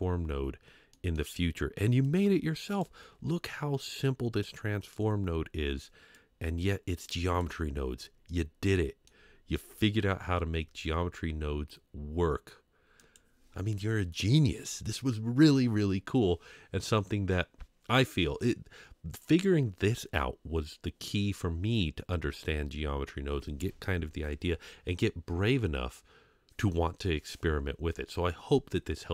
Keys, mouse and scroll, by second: 0.9 middle drag, 2.0 click, 6.1-7.5 drag, 8.3-9.0 middle drag, 28.8 scroll up 2.